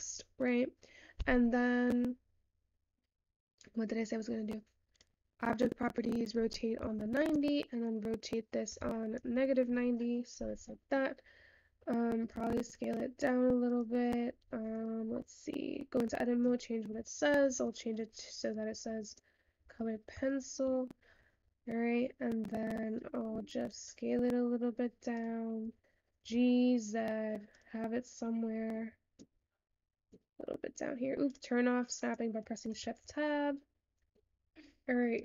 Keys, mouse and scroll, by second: 5.7 click, 7.3-12.1 drag, 12.1-15.9 scroll down 1.